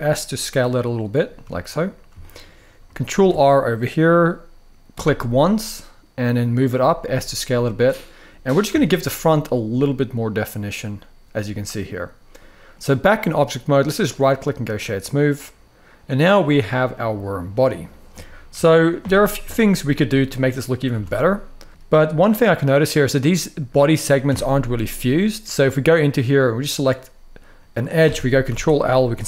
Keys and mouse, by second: 1.2 shift+middle click, 1.9 shift+middle click, 2.8 ctrl+r, 6.3 click, 6.8 s, 7.9 click, 8.6 Tab, 11.1-12.4 middle drag, 13.7-14.6 right drag, 15.1-16.1 middle drag, 16.4-17.1 middle drag, 18.2 KP_1, 19.2 shift+middle drag, 20.6 Tab, 21.3 middle click, 22.4-22.8 middle drag, 24.0 Tab, 24.3 middle click, 26.4 click, 27.3 middle click, 28.2 ctrl+l, 29.0 g.